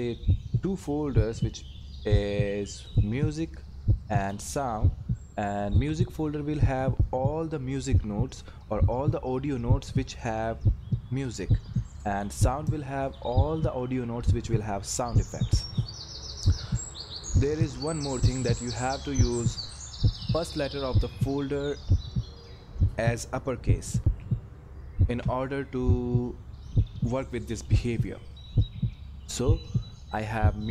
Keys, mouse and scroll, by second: 2.9 click, 13.0 click, 17.9 click, 20.1 Left, 24.0 shift+s, 25.1 Return, 29.0 scroll up 1, 30.1 click.